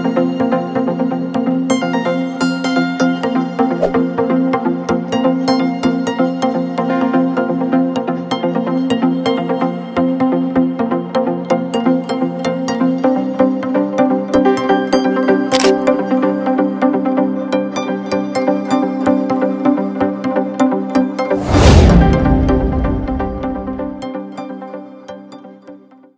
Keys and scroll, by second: 10.4 F4.